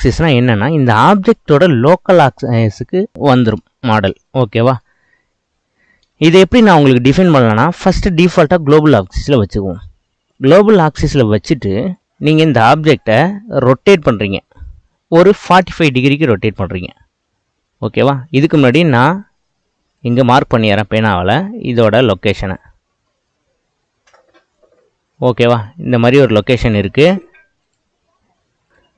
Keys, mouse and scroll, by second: 5.1-5.6 scroll up 1, 5.6-8.0 middle drag, 8.0-10.3 drag, 11.9 click, 14.0 r, 19.9-24.8 drag, 27.6-28.7 drag.